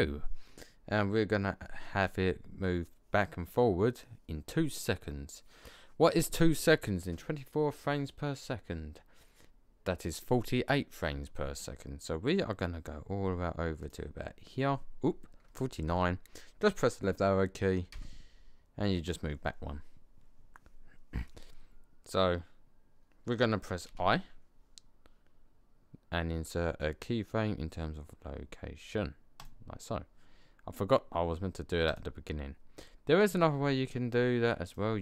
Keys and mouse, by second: 13.8 click, 17.9 Left, 24.4 i, 31.8 click, 34.6 click.